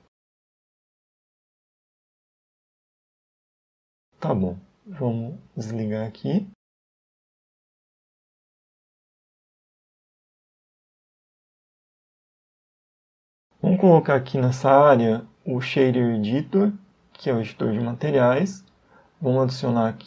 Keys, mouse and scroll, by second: 3.3 n, 4.6 click, 5.0 n, 6.4 Home, 7.2 a, 7.9 a, 8.1 a, 10.0 click, 13.4 click, 15.5 click, 17.3 right click.